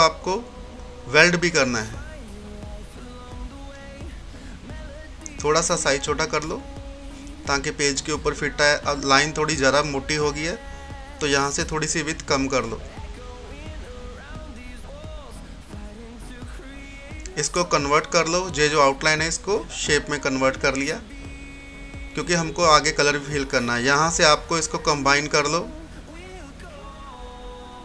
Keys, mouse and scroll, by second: 0.1 F10, 1.3-9.2 drag, 4.2 typing, 9.2 click, 12.3-13.4 scroll up 1, 14.6 click, 17.1-20.1 drag, 21.2 scroll up 1, 21.2 typing, 22.0 scroll down 1, 25.1 click, 25.6 typing.